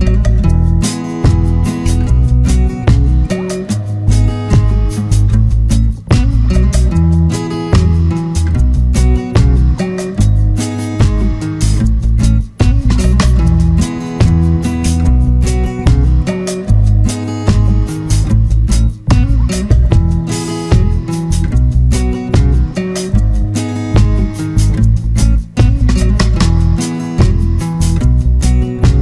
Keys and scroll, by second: 11.8 ctrl+z, 23.7 ctrl+z.